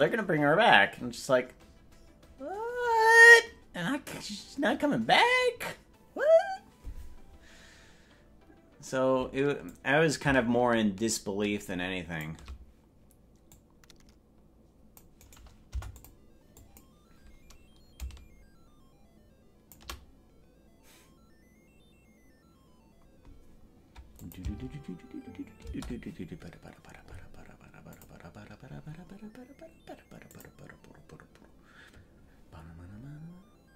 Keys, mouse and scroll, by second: 9.6-12.2 drag, 13.5-15.0 drag, 15.2 right click, 15.8 Delete, 16.5 click, 17.9-19.7 shift+drag, 24.2 click, 24.4 space, 25.8 space.